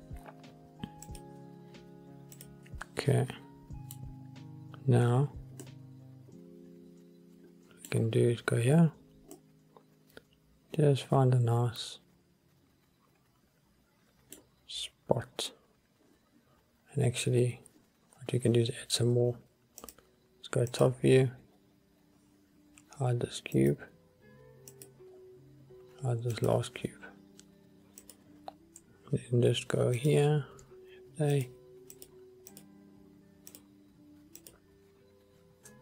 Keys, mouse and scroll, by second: 2.7-4.1 middle drag, 4.4 scroll up 1, 5.8-8.1 middle drag, 8.5-9.1 scroll down 1, 9.5-10.5 middle drag, 10.7-14.6 middle drag, 14.8 scroll down 1, 20.0 click, 20.9 click, 21.6 scroll down 2, 23.7 click, 24.8 click, 25.2-26.5 scroll down 2, 26.5 click, 28.1 click, 30.1 click, 31.5 shift+click, 32.1 shift+click, 32.6 shift+click, 33.6-34.6 shift+drag.